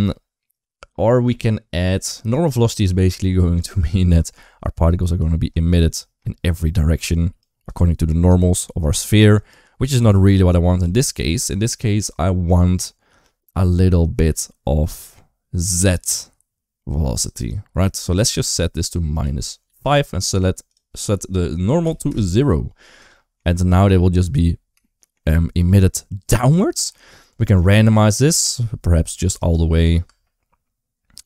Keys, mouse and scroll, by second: 3.6 shift+middle drag, 4.7 KP_1, 5.0 KP_3, 5.8 shift+middle click, 6.3-9.1 d, 6.5 click, 7.2 click, 7.9 click, 8.6 click, 9.2 click, 9.3 d, 9.9 ctrl+z, 10.1 ctrl+z, 10.3 ctrl+z, 10.6 ctrl+z, 10.9 ctrl+z, 17.2-19.6 drag, 20.6-21.9 drag, 23.0 shift+middle click, 23.3 middle click, 24.0 space, 24.7 shift+middle click, 27.4 click, 29.9 space.